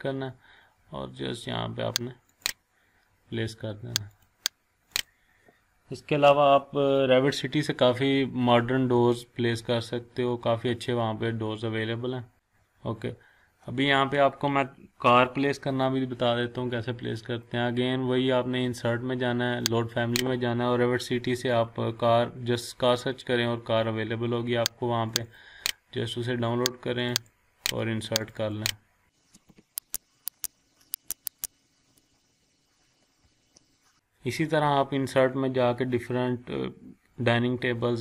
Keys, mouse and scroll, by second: 2.3 click, 9.3-9.9 scroll down 1, 9.9 scroll up 1, 10.7 scroll down 1, 11.8 scroll up 1, 12.3 scroll down 1, 12.6-13.4 scroll up 1, 13.4-14.5 scroll up 1, 19.9 click, 22.9 scroll down 1, 25.1 click, 29.5 BackSpace, 29.9 click, 33.5 scroll down 1, 33.7 scroll up 1.